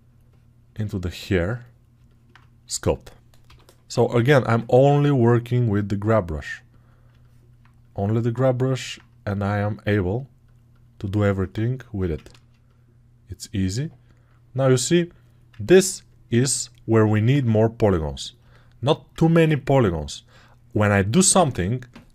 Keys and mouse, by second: 3.3 g, 3.8 [, 3.9 [, 15.4-22.1 ctrl+alt+drag.